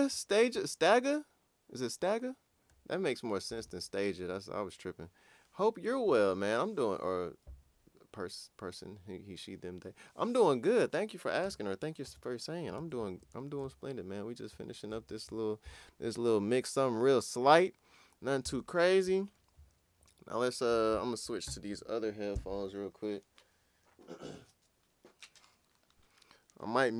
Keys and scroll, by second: 11.4 Return, 15.0 super+s.